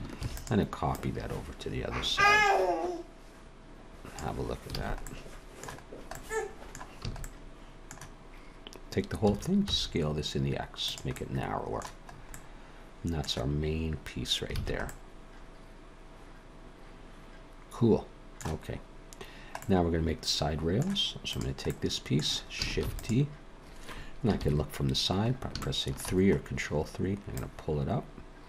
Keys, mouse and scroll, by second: 0.2 shift+d, 0.9 click, 4.8 alt+a, 5.1 middle click, 5.9-6.2 scroll down 2, 6.1 middle click, 7.0 a, 7.2 middle click, 9.3 s, 11.1 middle click, 12.1 scroll up 3, 12.3 middle click, 14.6 alt+a, 14.9 middle click, 18.7-19.3 scroll up 1, 19.3-19.6 scroll down 1, 19.6 middle click, 21.3 click, 21.7 middle click, 22.8 shift+d, 24.3 ctrl+KP_3, 25.2-25.5 scroll up 2, 25.6 shift+middle click, 26.4-27.1 scroll up 1, 27.3 click.